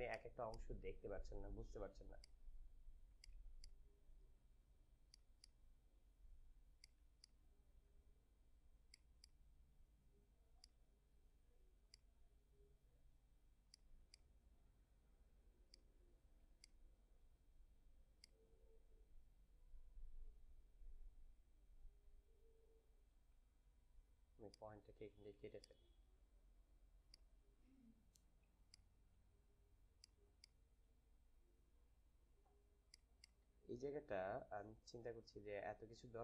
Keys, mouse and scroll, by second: 0.2 space, 0.7 space, 2.1 click, 3.4 space, 3.8 space, 5.0 click, 5.2 click, 5.8 space, 6.7 click, 7.1 space, 7.2 click, 7.5 space, 8.8 click, 9.2 click, 9.5 space, 10.5-13.6 drag, 13.8 space, 14.1 click, 14.4 space, 15.7 click, 16.4 space, 16.5 click, 16.9 space, 18.0-25.0 drag, 25.9 space, 27.0-28.5 drag, 28.5 space, 28.7 click, 29.0 space, 30.1 click, 30.2 space, 30.3 click, 30.7 space, 32.8 click, 32.9 click, 33.1 space, 33.5 space.